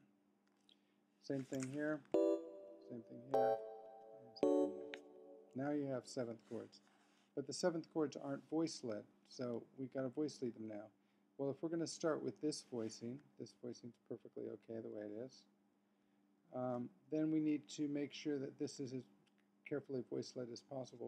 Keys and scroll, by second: 2.1 F3, 2.4 Right, 3.3 F3, 3.8 Right, 4.4 F3, 9.1 Left, 13.5 super+Down, 15.6 super+Up, 16.9 Right.